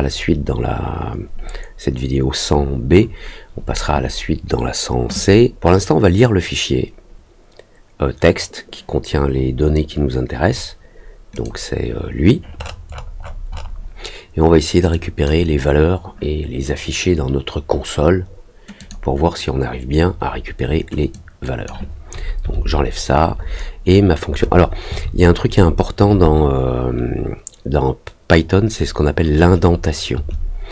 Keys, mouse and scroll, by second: 11.3 click, 12.5 middle click, 12.5-13.6 scroll up 4, 14.9 click, 18.7 click, 21.1 click.